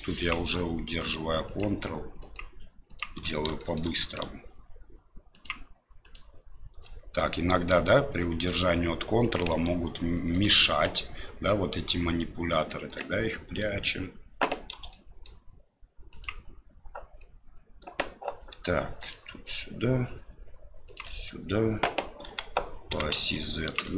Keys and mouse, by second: 0.2 ctrl+click, 1.4 ctrl+click, 2.2 ctrl+click, 2.9 ctrl+click, 3.6 shift+middle click, 5.4 ctrl+click, 9.4 ctrl+click, 14.7 e, 22.2 g.